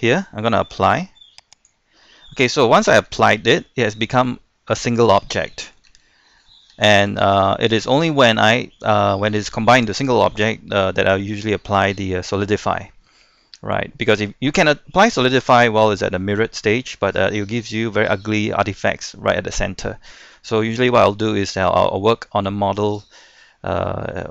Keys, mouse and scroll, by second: 1.5-2.7 drag, 3.0 Tab, 3.5-5.9 middle drag, 5.9 Tab, 7.5-8.7 middle drag, 9.1-9.8 scroll up 1, 10.1-13.3 middle drag, 13.3 scroll down 1, 13.6-17.9 middle drag, 20.5-20.9 scroll up 1, 21.1-24.3 middle drag.